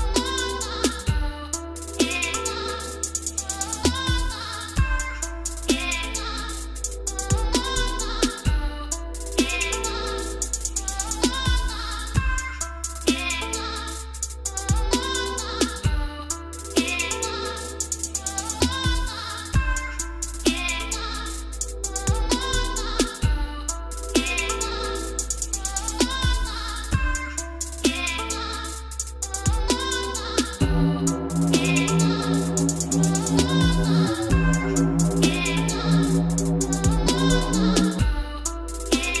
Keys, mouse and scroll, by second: 1.4 click, 3.4 BackSpace, 4.5-5.5 typing, 6.4 Return, 16.6 click, 19.3-19.7 typing, 19.8 Return, 21.3 click, 21.9 click, 23.1 click, 25.1 click, 25.8 click, 28.2 click, 28.8-29.3 scroll up 11, 30.1 click, 30.8 click, 32.1 click, 32.7 click, 33.2-33.7 scroll down 8, 34.7 middle click, 34.8 middle click, 35.1 middle click, 35.7 click, 37.7 click, 38.5-38.9 scroll up 4, 38.9-39.2 scroll down 1.